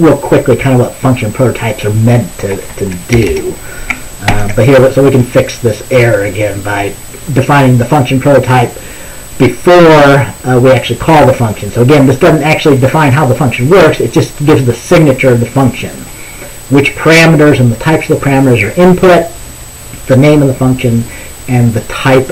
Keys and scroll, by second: 2.9 Right, 3.2 BackSpace, 3.4 BackSpace, 4.4 ctrl+s.